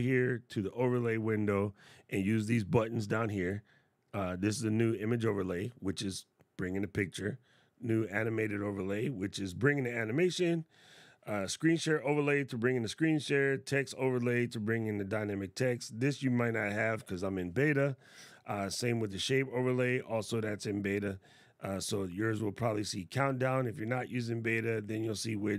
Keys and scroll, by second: 13.1 y.